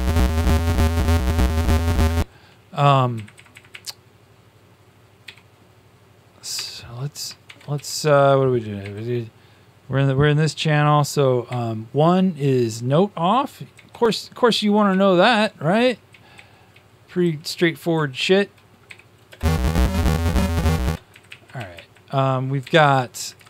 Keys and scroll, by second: 3.4 Up, 3.4-4.2 typing, 5.2 Home, 6.5 Tab, 7.4 shift+Tab, 7.7 Right, 8.7 e, 11.4 1, 15.3-18.7 typing, 21.5 Up, 22.5 Up, 23.1 Left, 23.3 Left.